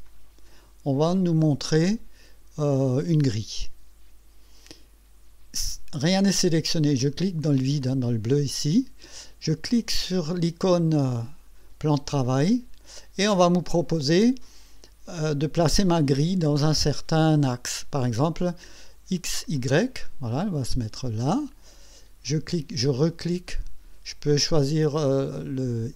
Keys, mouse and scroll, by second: 0.1 click, 1.4 click, 3.0-5.1 drag, 7.0 click, 7.8 click, 12.4 click, 19.6 click, 20.3-21.7 drag, 23.5 click.